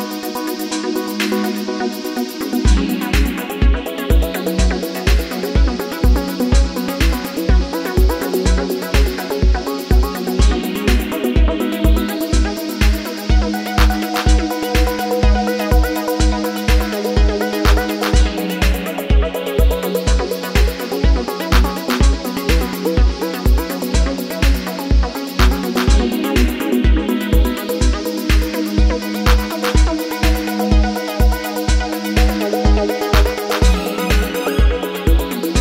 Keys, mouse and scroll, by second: 2.5 alt+click, 16.3-16.8 typing, 17.9 Return, 33.5-33.9 typing.